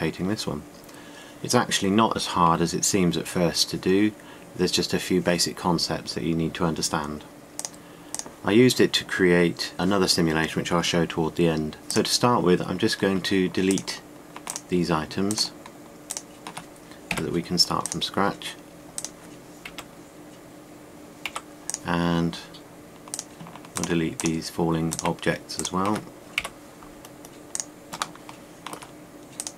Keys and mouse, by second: 8.3-9.9 drag, 15.2-17.8 drag, 17.8 Delete, 20.3 Delete, 22.4 Delete, 27.0 Delete.